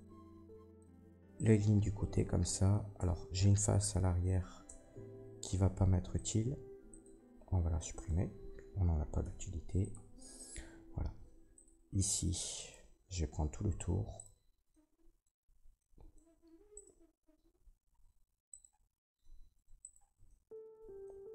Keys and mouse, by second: 1.3 alt+shift+middle click, 1.3 alt+shift+right click, 2.9 Tab, 4.6 Tab, 7.9 middle click, 9.1 Delete, 12.5 alt+middle click, 14.1-16.1 alt+shift+drag, 14.1 alt+shift+middle click, 14.1 alt+shift+right click, 16.7 alt+shift+middle click, 18.4 alt+shift+middle click, 19.3 ctrl+z, 19.7 alt+shift+click, 20.2-21.3 drag.